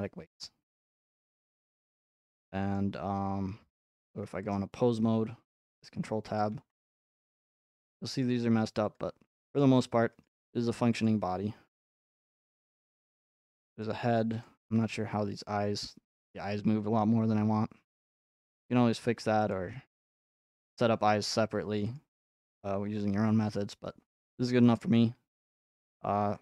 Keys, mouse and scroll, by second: 1.7 middle click, 2.3 middle click, 4.1 ctrl+Tab, 4.5 click, 5.1 r, 6.1 click, 6.5 r, 7.3 middle click, 7.7 click, 7.8 r, 8.2 middle click, 9.0 click, 9.1 scroll up 3, 9.6 middle click, 9.7 r, 10.2 click, 11.1 right click, 11.1 click, 11.3 r, 12.2 click, 12.8 right click, 12.8 click, 13.0 r, 13.1 r, 13.9 middle click, 14.4-16.5 drag, 14.6 r, 14.8 r, 19.0 middle click, 19.5-21.1 drag, 19.9 r, 20.0 r, 22.0 middle click, 22.5 click, 23.0 r, 23.2 r, 24.8-25.8 shift+middle drag, 25.8-26.4 drag.